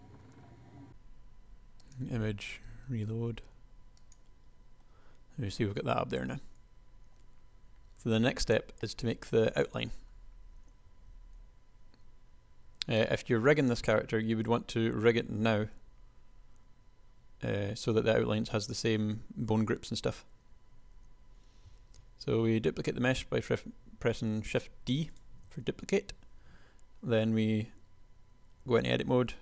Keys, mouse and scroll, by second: 0.1 KP_1, 0.4 KP_1, 0.7 Tab, 0.8 Tab, 6.1 Tab, 11.4 KP_1, 21.9 shift+d, 25.8 Tab.